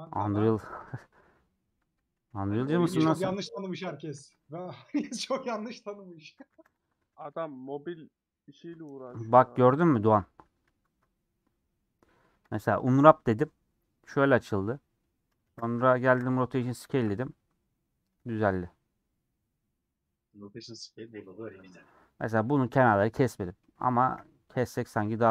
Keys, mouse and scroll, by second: 0.1 ctrl+click, 1.1 scroll down 2, 1.3 middle click, 2.2 /, 2.5-3.5 scroll down 8, 2.8 /, 3.6 middle click, 4.2 a, 10.7 ctrl+z, 11.7 Tab, 12.5 Tab, 13.0-13.5 scroll up 4, 15.8 Tab, 18.3-22.0 middle drag, 22.0-22.4 scroll up 2, 22.4 middle click, 22.9 Tab, 23.3 middle click, 23.8 2, 23.9-25.3 alt+drag.